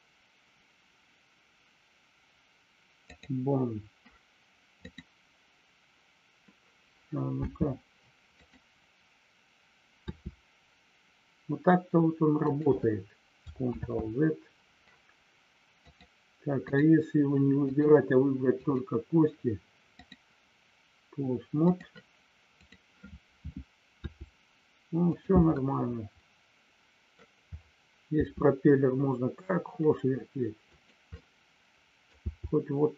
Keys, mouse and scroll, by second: 4.7-6.6 drag, 7.5 space, 8.3 click, 10.0 r, 12.4 click, 13.9 ctrl+z, 15.7-16.7 drag, 17.6 click, 18.5 click, 20.0-21.7 drag, 22.5 click, 25.5-27.1 middle drag, 30.7 click, 31.1-32.1 middle drag.